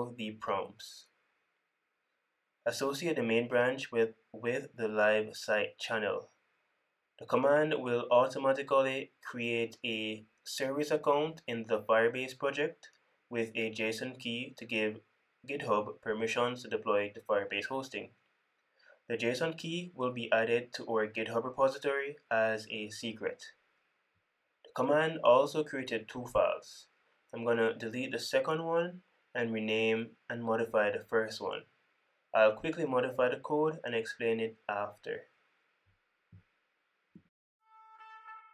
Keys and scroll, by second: 26.0 super+b, 36.0 super+b, 38.2 super+c.